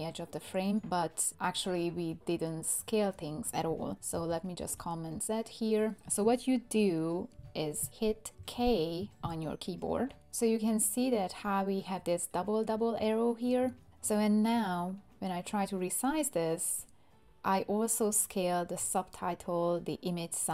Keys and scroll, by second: 4.1 super+z, 8.4 k.